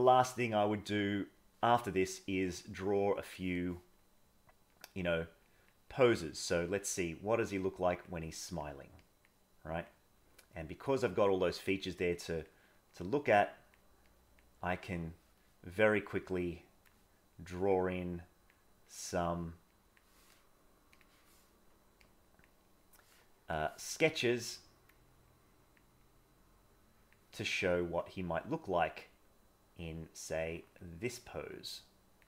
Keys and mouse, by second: 0.7 middle click, 2.1-3.4 drag, 4.7 click, 5.9-7.0 drag, 7.3 click, 8.3 click, 9.0 click, 9.5 click, 10.4 click, 11.0 click, 12.2 click, 13.0 click, 14.1 click, 15.0 middle click, 16.1 click, 17.4 click, 18.2 click, 18.9 click, 19.8 click, 20.9 click, 22.0 click, 24.3 click, 24.7 click, 25.4 click, 26.1-27.1 drag, 27.7 click, 28.4 click, 29.1-30.7 drag, 30.9 click, 31.4 click, 31.8 click.